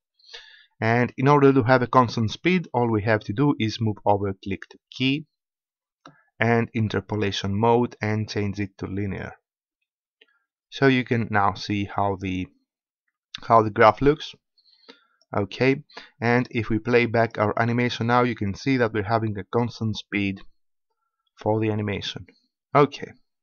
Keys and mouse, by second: 4.9-6.8 drag, 14.0 click, 14.8-20.3 drag.